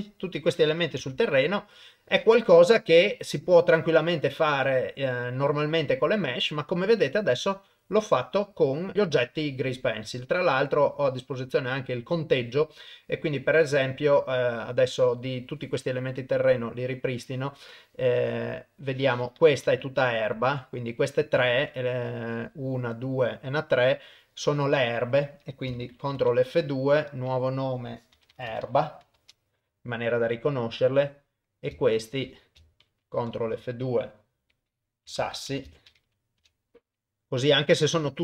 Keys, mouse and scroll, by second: 1.0 KP_0, 5.3 middle click, 8.6 middle click, 10.8 click, 11.1 middle click, 12.2 click, 13.5-13.8 drag, 16.2 click, 17.2 click, 18.6 middle click, 19.8 shift+click, 20.6 shift+click, 20.6 middle click, 21.3 middle click, 22.9 middle click, 24.4 middle click, 26.1 ctrl+F2, 31.5 click, 31.9 shift+click, 33.2 ctrl+F2, 35.6 s.